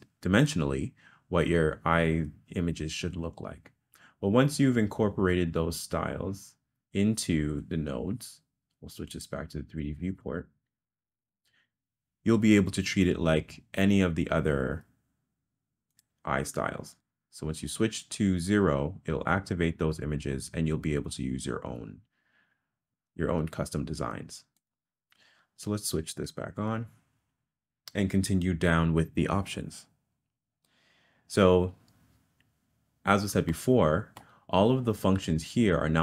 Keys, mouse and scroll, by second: 16.1 click, 17.0 click, 18.6 click, 19.3 click, 24.6 click, 33.6 middle click.